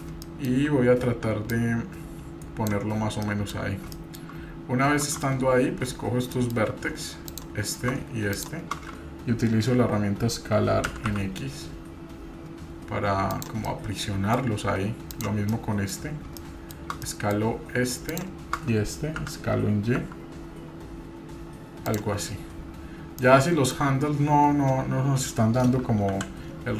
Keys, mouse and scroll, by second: 0.2 shift+middle click, 1.5-2.7 drag, 3.2 middle click, 3.2 scroll down 1, 4.0 shift+middle click, 4.3-5.1 scroll up 2, 5.1 scroll up 1, 5.2 Tab, 5.7-6.2 scroll up 1, 6.3 shift+middle drag, 7.3-7.8 drag, 8.3-8.7 shift+drag, 10.9 s, 13.6 middle click, 15.1 click, 15.5-15.9 middle drag, 16.4 shift+middle click, 17.0 middle click, 18.1 shift+click, 19.2 s, 22.6-23.2 scroll up 2, 23.2 shift+middle click, 26.2 KP_7.